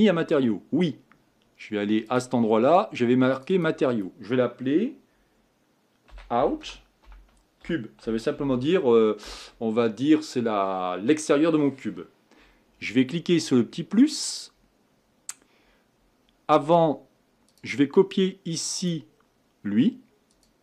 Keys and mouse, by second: 5.0-20.6 drag.